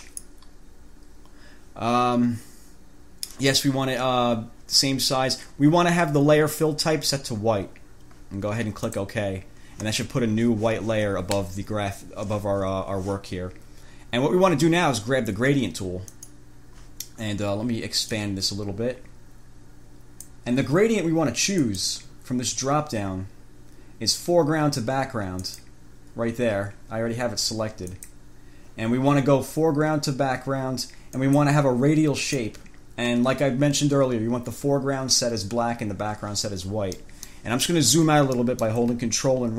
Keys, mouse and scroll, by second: 0.2 click, 9.0 click, 16.4 click, 18.3-20.7 drag, 21.8 click, 25.6 click, 28.2 click, 31.4 click, 32.4 click, 37.2 click, 38.5 click.